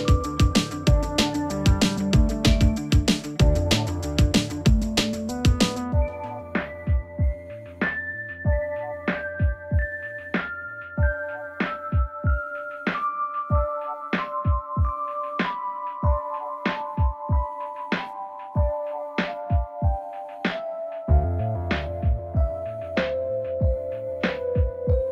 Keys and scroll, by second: 12.9 Escape, 16.7 ctrl+z.